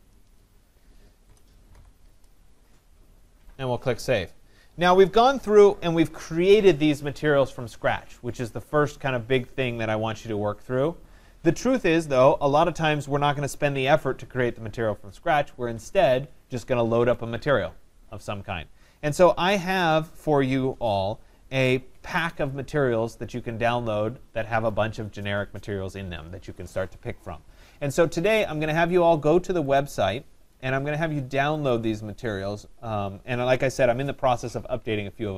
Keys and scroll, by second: 0.9 BackSpace.